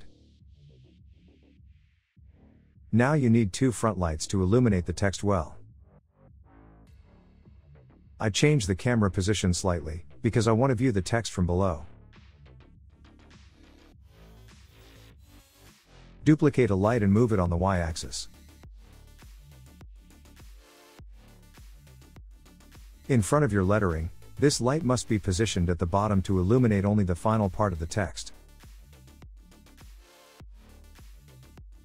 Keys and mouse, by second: 0.9 click, 6.9 click, 8.4 click, 9.6 click, 10.4-13.0 drag, 15.1 click, 16.5 shift+d, 19.9 click, 21.5-23.5 drag, 24.2 click, 24.5 click, 25.3 click, 26.3 click, 27.4-30.2 drag, 31.2 click, 31.5-31.8 drag.